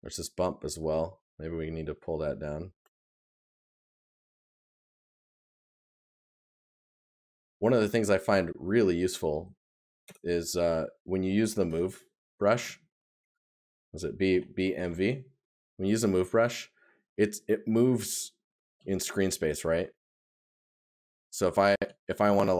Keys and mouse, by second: 6.4 right click, 19.0 right click, 22.1 right click.